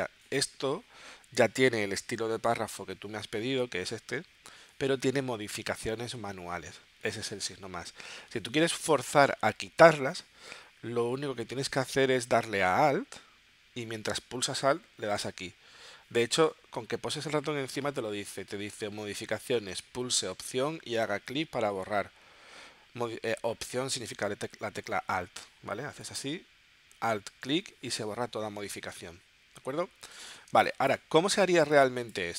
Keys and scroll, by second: 30.6 space.